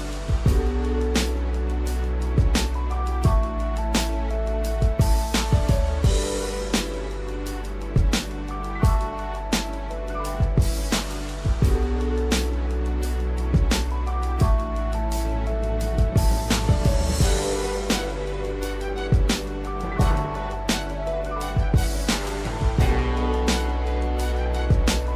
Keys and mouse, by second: 0.0 shift+middle click, 0.7 click, 1.6 g, 4.4 click, 4.7 g, 6.7 click, 7.0-8.1 drag, 9.2-10.5 drag, 10.8 shift+middle click, 11.4 click, 12.1 click, 13.3 shift+middle click, 14.2 click, 14.4-16.6 drag, 18.2 shift+middle click, 19.9 click, 21.2-22.6 drag, 24.1-25.1 drag.